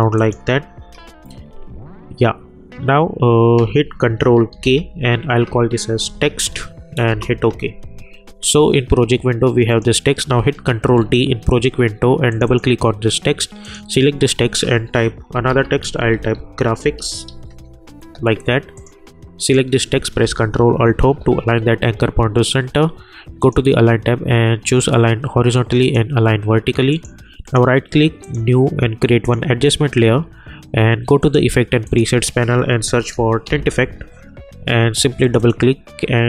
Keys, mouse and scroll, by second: 0.8 u, 4.5 ctrl+k, 5.6-6.8 typing, 7.1 Return, 9.7 click, 10.8 ctrl+d, 12.3 click, 14.3 ctrl+a, 15.1-17.7 typing, 18.7 click, 20.8 ctrl+alt+Home, 23.4 click, 26.2 click, 27.5 right click, 28.2 click, 32.5-34.1 typing, 35.2 click.